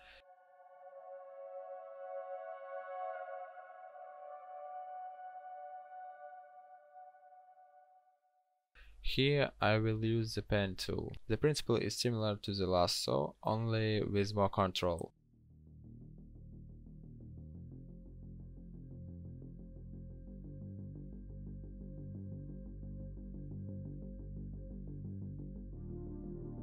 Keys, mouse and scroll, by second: 1.6 Delete, 4.2 ctrl+n, 6.3 b, 8.4 p.